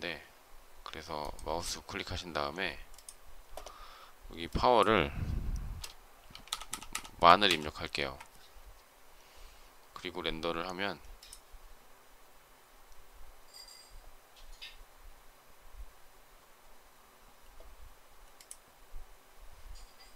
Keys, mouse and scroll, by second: 7.3 typing, 7.8 Return.